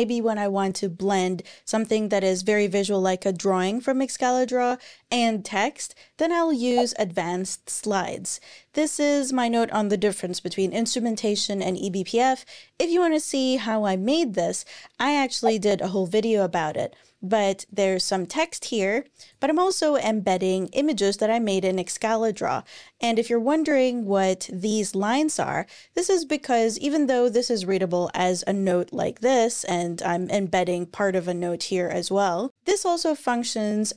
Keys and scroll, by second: 19.6 Page_Down, 21.4 Page_Up.